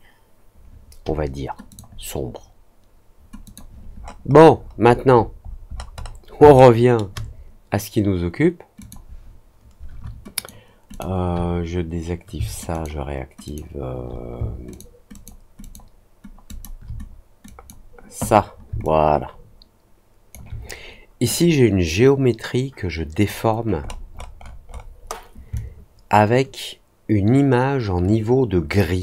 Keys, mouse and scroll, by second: 1.6 click, 3.4 click, 3.9-6.1 scroll down 14, 6.5 alt+middle click, 8.7 click, 10.3 alt+click, 10.8 alt+click, 12.7 alt+click, 13.4 alt+click, 14.6 alt+click, 15.1 alt+click, 15.5 alt+click, 16.4 alt+click, 17.4 click, 18.8-20.2 alt+drag, 21.2-23.2 drag, 23.8-24.6 scroll up 4, 24.6 middle click, 24.9 middle click, 25.5-29.0 alt+drag.